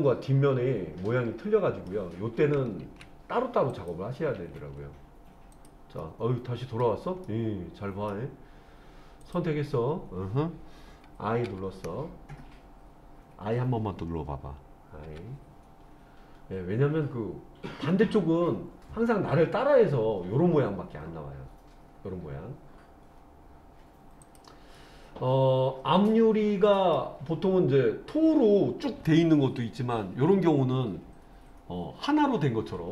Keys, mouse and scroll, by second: 0.2 middle click, 2.8 ctrl+z, 3.7 click, 4.4 ctrl+z, 5.5 click, 6.0 middle click, 7.3 middle click, 9.2 click, 11.5 i, 15.1 i, 24.2 click, 24.8-27.0 middle drag.